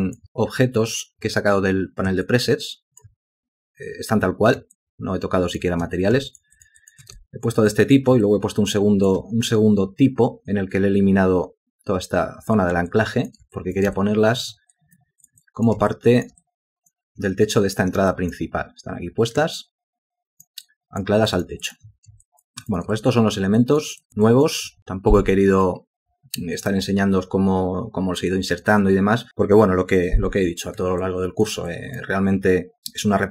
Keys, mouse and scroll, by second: 2.3 alt+click, 4.8 alt+click, 6.3 ctrl+alt+click, 6.6 ctrl+alt+click, 6.7 ctrl+alt+double click, 6.8 ctrl+alt+click, 7.3 shift+click, 8.2 ctrl+click, 12.9 alt+click, 13.6 ctrl+alt+click, 14.0 alt+shift+click, 14.7 alt+click, 15.2 alt+click, 15.9 ctrl+alt+click, 16.4 alt+click, 18.1 alt+click, 19.6 alt+click, 20.7 alt+click, 21.3 alt+click, 21.6 alt+click, 21.7 alt+double click, 22.3 ctrl+alt+click, 22.7 ctrl+alt+double click, 22.9 alt+shift+click, 23.6 alt+click, 24.0 alt+click, 24.3 alt+click, 31.0 alt+click, 31.7 alt+click.